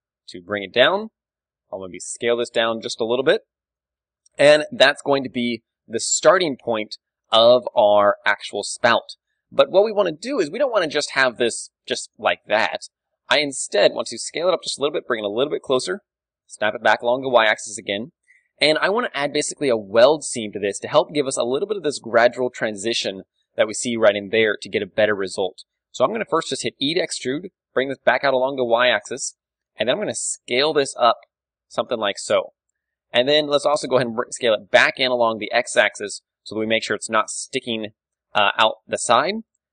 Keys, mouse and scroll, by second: 0.7 click, 0.8 KP_1, 1.5 s, 3.3 click, 3.3 KP_3, 3.9 a, 4.1 Tab, 4.4 click, 4.8-7.6 middle drag, 8.3 KP_1, 8.7-11.1 middle drag, 11.1 Tab, 11.5 a, 12.1-15.0 right drag, 12.1 a, 12.7 s, 15.2-18.3 drag, 15.7 g, 16.7 KP_3, 17.8 KP_1, 19.4 KP_3, 21.4 d, 21.8-24.5 drag, 22.9-24.5 middle drag, 22.9 d, 24.5-26.7 right drag, 24.5 d, 26.8 e, 29.3 click, 29.3 z, 29.9 s, 32.0 z, 32.4-33.5 drag, 33.5 middle click, 34.1 s, 36.7-38.3 drag, 37.6 s, 38.3 middle click, 39.1-39.7 drag, 39.4 a.